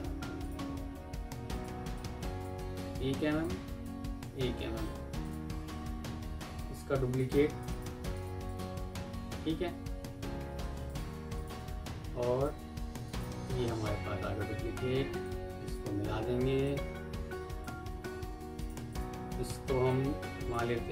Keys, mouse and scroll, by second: 1.8 double click, 2.8 Right, 4.0 Left, 7.0 ctrl+right click, 7.6 shift+click, 7.8 c, 8.3 double click, 11.2 shift+click, 12.4 shift+click, 12.9 ctrl+right click, 13.4-14.3 alt+scroll down 7, 17.8 alt+scroll down 1, 18.8 double click.